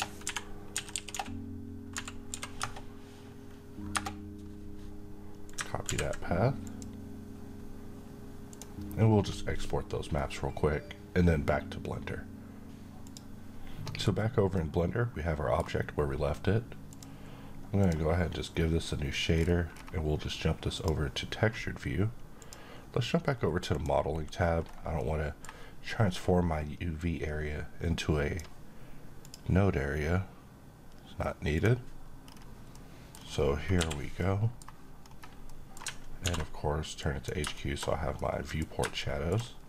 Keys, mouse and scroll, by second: 0.1-2.2 typing, 2.5 Return, 5.3 click, 5.7 c, 6.5 click, 16.7 click, 19.1-20.6 scroll down 1, 20.6 click, 23.0-23.5 scroll up 1, 23.5 click, 24.8-25.4 middle drag, 26.8-28.3 drag, 31.4 click, 32.0-32.5 scroll up 1, 32.5-33.2 middle click, 32.9-33.6 scroll up 1, 33.6 n, 34.0-34.6 middle click, 34.8-35.3 scroll up 1, 35.3 middle click, 36.0 alt+v, 36.8 click, 37.3 shift+middle click, 37.7-38.0 scroll up 1, 38.0-38.6 middle click, 38.5 scroll up 1, 38.8-39.4 shift+middle click, 39.5 scroll down 1.